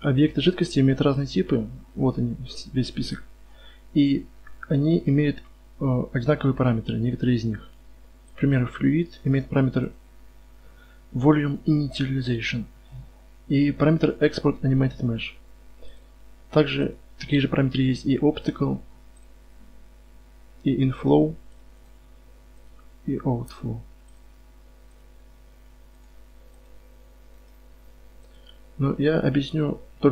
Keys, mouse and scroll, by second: 0.2-8.4 right drag, 16.9-30.1 drag.